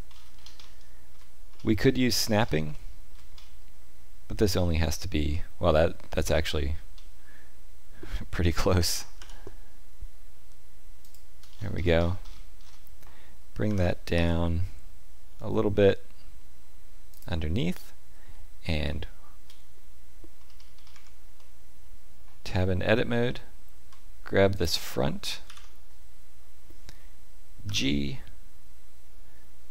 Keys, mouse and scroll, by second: 0.0-0.4 scroll up 7, 0.5 shift+middle click, 1.5-2.2 scroll up 3, 2.3-2.7 scroll up 2, 2.7 shift+middle click, 3.3-5.0 scroll up 1, 7.0-7.6 scroll up 1, 8.7 g, 11.5-13.6 scroll down 21, 13.6 g, 18.8 shift+middle click, 20.4-20.8 scroll up 4, 20.8 Tab, 21.3 middle click, 23.2 middle click, 23.5 shift+middle click, 24.5 alt+click, 25.4 ctrl+KP_3, 27.6 g.